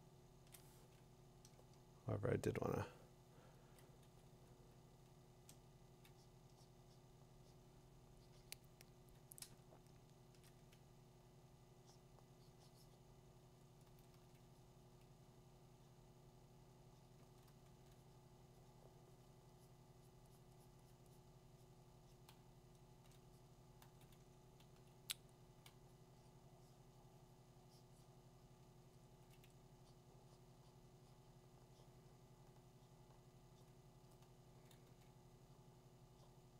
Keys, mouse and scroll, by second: 0.2 click, 3.8 click, 4.3 2, 5.3 click, 6.0 2, 6.2 3, 10.4 click, 13.9 [, 14.1 [, 17.4 [, 22.8 [, 24.6-25.6 ], 28.6-29.3 [, 34.2 [, 34.9 [.